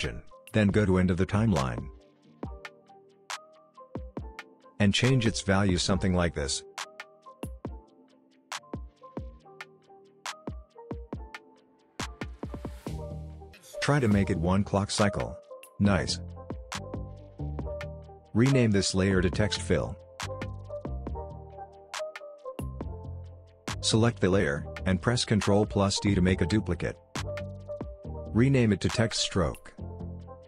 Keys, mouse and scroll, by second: 5.9-8.4 drag, 18.1 right click, 18.6 click, 19.6-22.4 typing, 23.0 Return, 24.1 click, 26.2 ctrl+d, 27.6 right click, 28.0 click, 28.1 click, 29.5 Left, 30.0 Right.